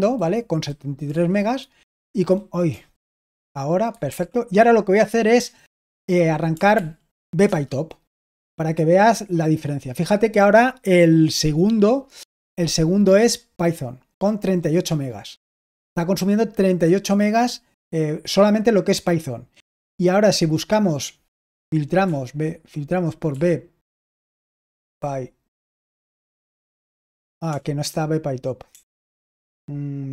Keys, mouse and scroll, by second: 1.0 Right, 2.6 Left, 4.0 super+l, 6.7 ctrl+p, 7.4 Return, 20.3-22.0 drag, 22.0 typing, 24.1-25.8 typing, 27.4 BackSpace.